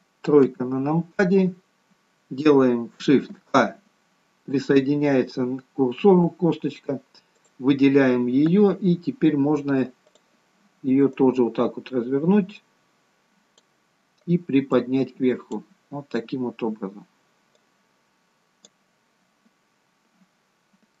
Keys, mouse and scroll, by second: 0.4 KP_3, 1.6-3.0 scroll up 2, 3.0 scroll up 2, 3.3 shift+a, 7.3 click, 14.8 click, 20.4-21.0 scroll down 3.